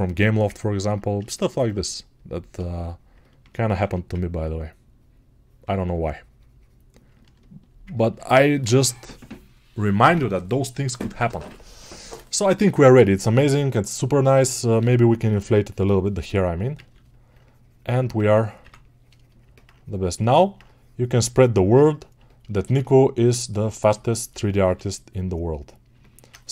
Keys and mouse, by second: 4.0 ctrl+1, 16.5 ], 19.3-26.5 alt+right drag.